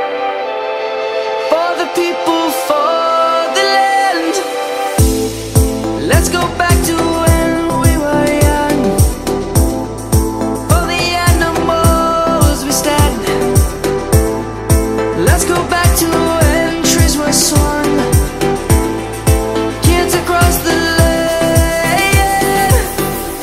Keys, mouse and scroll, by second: 2.1 right click, 4.2-6.5 typing, 6.5 Return, 9.3-10.5 typing, 11.5 click, 13.8-14.4 typing, 14.7 Return, 15.9-21.3 drag, 22.3 F10, 22.6 click.